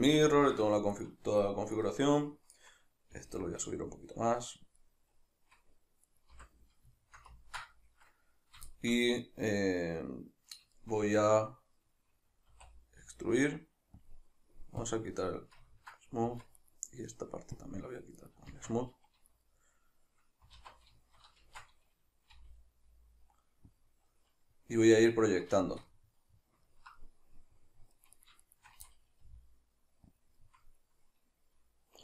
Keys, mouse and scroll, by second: 0.3-0.9 ctrl+middle drag, 0.9 shift+right click, 1.8 right click, 3.1 g, 4.8 click, 6.1 right click, 6.3 l, 7.0-14.1 shift+middle drag, 12.5 e, 14.1 click, 15.7-16.6 ctrl+middle drag, 16.3 Tab, 16.6 right click, 17.6-18.2 drag, 18.2 right click, 18.5 Tab, 19.6-22.3 middle drag, 20.6 alt+q, 21.4 shift+Tab, 22.3 g, 23.8 click, 25.6-28.2 shift+middle drag, 28.2 right click, 28.5 shift+right click, 28.9-30.3 middle drag, 29.3 g, 30.3 click, 30.4-32.0 middle drag.